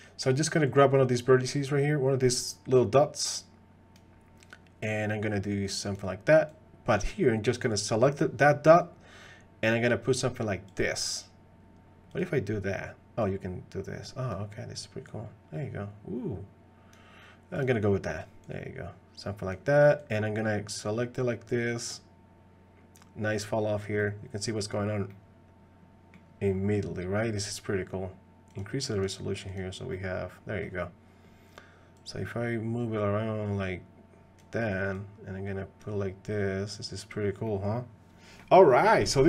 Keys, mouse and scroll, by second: 0.6-4.0 drag, 4.9-6.0 drag, 6.5 click, 7.8 click, 10.7 click, 12.1 click, 13.4 click, 15.1-16.9 drag, 17.6 click, 18.5-19.5 drag, 20.0-23.0 drag, 24.0 middle click, 25.1-26.1 middle drag, 26.5 middle click, 28.5 click, 28.9 click, 29.5 click, 29.9 middle click, 32.0-34.4 drag, 35.0 click, 36.8 click, 37.5 middle click, 38.7 middle click.